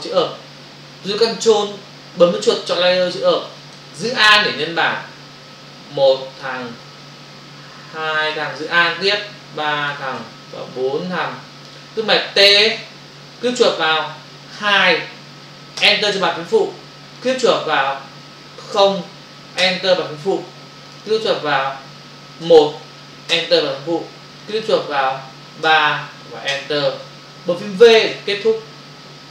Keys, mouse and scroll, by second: 3.0 ctrl+click, 4.6 alt+click, 7.2 alt+click, 9.1 alt+click, 10.5 alt+click, 12.8 t, 13.5 click, 13.6 double click, 14.6 2, 15.8 Return, 17.2 click, 17.3 click, 17.5 double click, 18.9 0, 19.6 Return, 21.0 double click, 22.4 1, 23.4 Return, 24.4 click, 24.7 double click, 25.6 3, 26.5 Return.